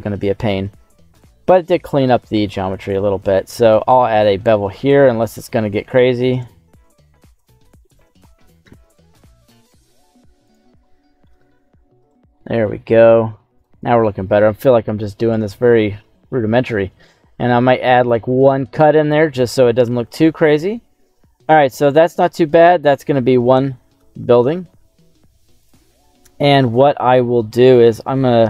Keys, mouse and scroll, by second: 1.1 shift+right click, 1.4 middle click, 2.8 shift+right click, 3.8 ctrl+b, 5.2 right click, 6.2 right click, 6.8 shift+right click, 7.6 middle click, 8.0 shift+middle click, 8.8 right click, 9.4 right click, 10.4 shift+right click, 10.8 middle click, 11.9 shift+right click, 12.3 middle click, 13.5 shift+right click, 14.2 ctrl+b, 17.4 scroll up 1, 18.9 click, 19.8 Tab, 20.1-20.5 scroll down 2, 20.4-21.5 middle drag, 21.8 right click, 22.2 middle click, 22.7-23.2 scroll down 2, 23.5 g, 23.9 x, 25.6 click, 26.1 middle click, 26.6 middle click.